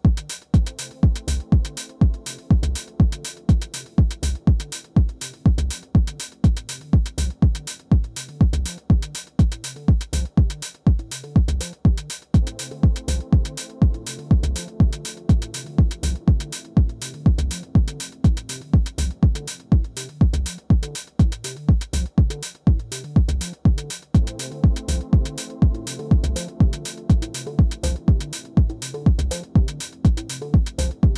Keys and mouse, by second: 2.5-3.7 middle drag, 3.7-11.8 drag, 11.8 alt+w, 11.9 middle click, 15.9 f, 16.9-24.1 drag, 20.1-23.8 middle drag, 24.1 middle click, 26.2-28.5 middle drag, 27.1 alt+w, 30.8-31.1 middle drag.